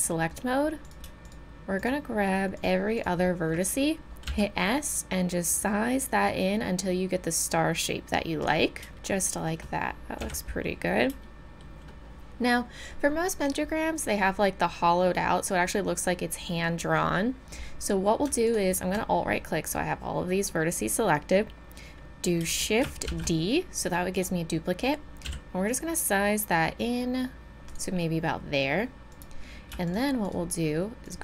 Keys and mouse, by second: 0.4-4.3 drag, 4.3 s, 9.1 middle click, 10.2 a, 23.1 shift+d, 25.2 s, 29.1-31.2 right drag.